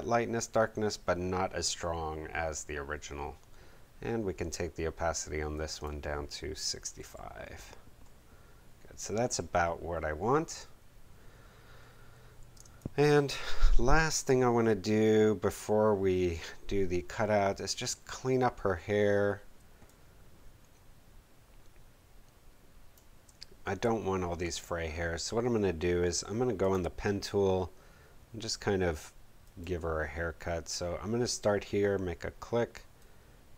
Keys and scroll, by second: 6.5-7.5 typing, 12.5 space, 19.5 space.